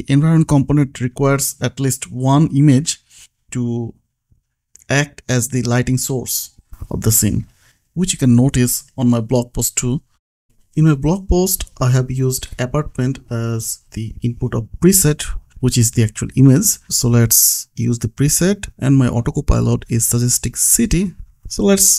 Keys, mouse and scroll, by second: 0.7 click, 3.0 click, 5.6 click, 8.3 click, 8.7-10.5 scroll down 1, 11.0 click, 13.6 click, 16.1 click, 16.8-18.2 typing, 18.7 Return.